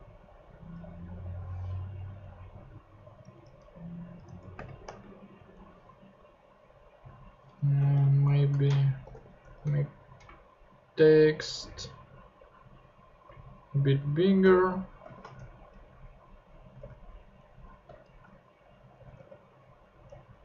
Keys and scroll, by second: 1.9 Down, 3.1 Return, 3.4 super+Tab, 4.5 super+space, 4.9 super+Tab, 7.6 Left, 7.8 shift+Right, 8.8-9.6 typing, 13.2 super+Tab, 13.8 shift+super+Tab, 13.9 shift+super+4, 14.5 shift+BackSpace, 15.0 shift+r, 15.3 shift+super+Tab, 16.3 super+Tab, 16.8 super+Tab, 17.2 super+Left, 17.8 shift+Left, 17.9 shift+Right, 18.9 shift+3, 19.1 super+Tab.